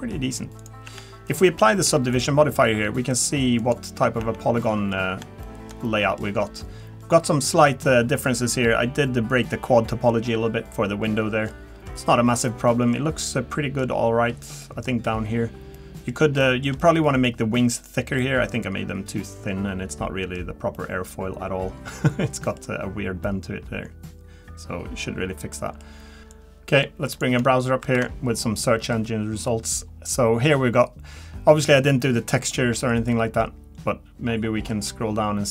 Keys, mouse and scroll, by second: 0.4 ctrl+z, 0.4 scroll down 5, 0.6 click, 0.9 Tab, 1.8 Tab, 2.1 click, 3.1 click, 3.6 click, 4.2 Tab, 4.6 middle click, 5.0-5.4 scroll up 3, 5.4 shift+middle click, 5.8 middle click, 6.5-7.0 scroll down 1, 11.0-11.5 scroll down 3, 11.5 middle click, 12.0-12.4 scroll up 3, 12.4 middle click, 13.0-13.5 scroll up 2, 13.5 middle click, 14.1-14.5 scroll down 3, 14.6 middle click, 15.7 middle click, 16.4 shift+middle click, 16.5 shift+middle click, 16.8 middle click, 18.2 middle click, 20.4-20.7 scroll down 2, 20.7 middle click, 23.2 middle click.